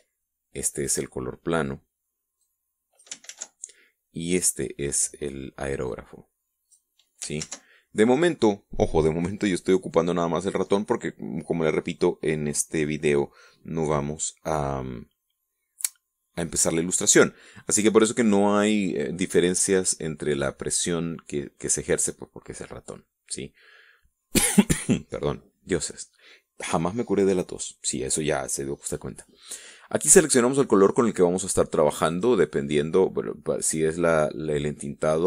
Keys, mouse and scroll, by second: 0.0 ctrl+z, 1.3 click, 2.8 click, 3.7 ctrl+z, 4.7 click, 6.3-7.3 drag, 7.8 ctrl+z, 32.5 click.